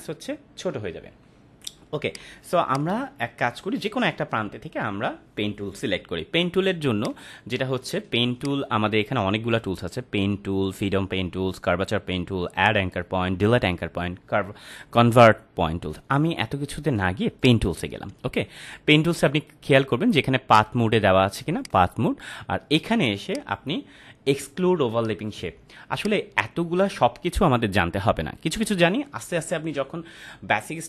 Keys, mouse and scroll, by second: 1.0 ctrl+=, 1.8 space, 2.1 click, 2.3-2.7 space, 2.7 click, 2.8-3.6 space, 7.0 click, 8.4 right click, 17.4 click, 20.5 click, 25.9 click.